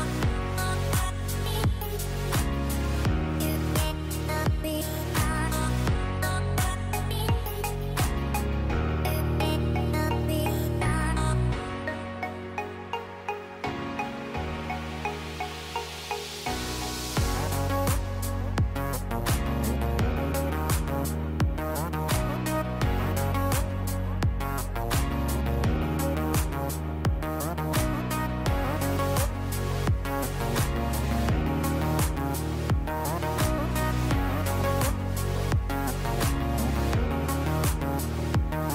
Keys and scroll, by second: 1.5 F9, 3.2 space, 17.1 space, 26.7 ctrl+c, 29.1 ctrl+v, 30.6 u, 37.3 space.